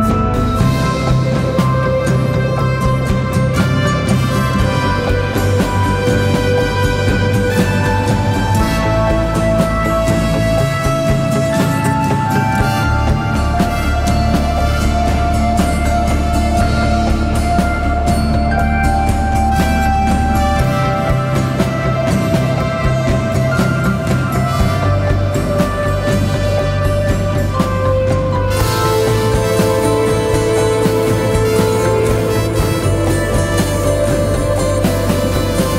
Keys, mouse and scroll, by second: 0.5 ctrl+t, 1.5 alt+shift+click, 12.8 Return.